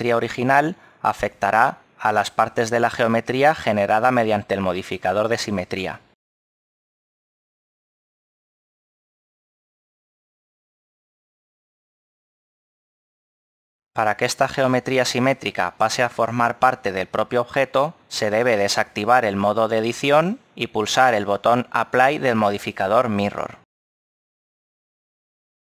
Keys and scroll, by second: 6.8 ctrl+z, 20.7 Tab.